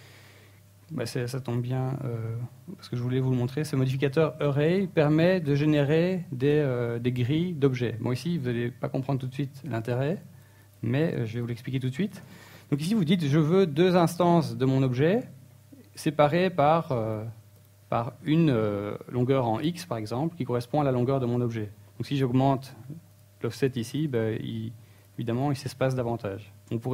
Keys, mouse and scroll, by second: 2.6-3.7 scroll down 6, 3.7 middle click, 6.4 click, 7.5 click, 7.7 click, 8.5 click, 8.9 click, 13.0 click, 14.5 click, 14.5 KP_1, 20.1 click, 20.5 click, 20.7 click, 20.9 click, 21.2 click, 22.0 click, 22.2 click, 22.4 click, 23.7 click, 24.0 click, 24.3 click, 24.4 click, 25.2 click, 25.4 click, 25.9 click, 26.7 click.